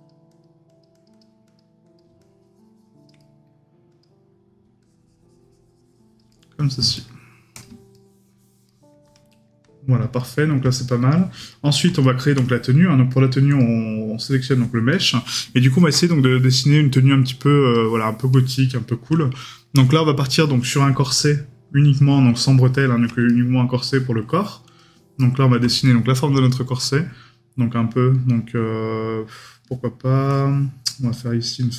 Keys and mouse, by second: 3.2 right click, 6.3 right click, 14.9 right click, 18.7 right click, 23.3 right click, 25.2 right click.